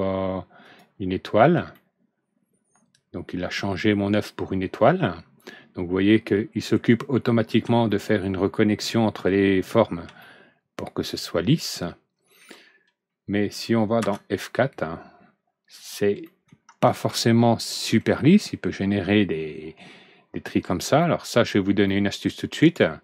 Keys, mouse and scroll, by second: 0.5 click, 1.5 alt+Right, 1.7-6.7 middle drag, 7.1-7.5 scroll up 1, 7.8-9.2 middle drag, 9.5 scroll down 1, 10.1-12.3 middle drag, 13.9 F4, 14.7 scroll up 1, 16.2 middle click, 16.9 alt+Right, 17.0 middle click, 18.5 scroll up 1, 20.4 scroll down 1, 20.9 alt+Right, 20.9 middle click, 21.8-22.2 middle drag, 22.5 right click.